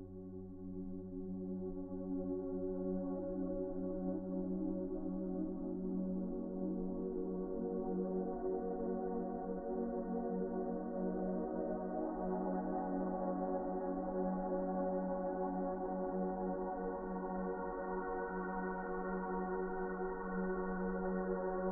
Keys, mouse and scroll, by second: 3.2 Delete, 3.7-8.5 typing, 7.3 ctrl+z, 7.3 ctrl+z, 9.8 s, 13.0 s, 13.8 s, 19.6 s.